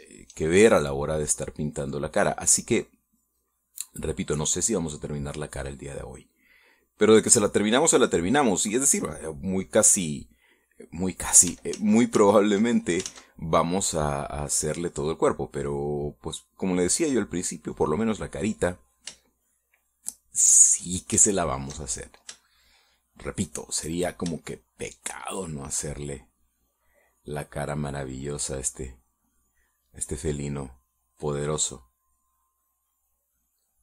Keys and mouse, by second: 0.6 shift+middle click, 2.1-9.2 drag, 9.6 middle click, 11.3-12.4 middle drag, 12.7 ctrl+z, 14.0 ctrl+z, 14.7-19.0 drag, 19.3 middle click, 20.3-21.7 shift+middle drag, 22.2 shift+middle click, 22.8-24.4 shift+middle drag, 25.4 shift+middle click, 28.7-33.8 drag.